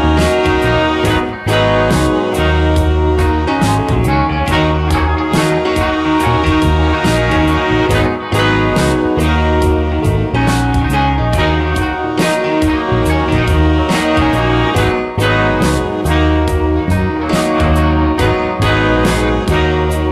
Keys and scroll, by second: 1.9 space, 5.9 space, 7.0 space, 13.8 space.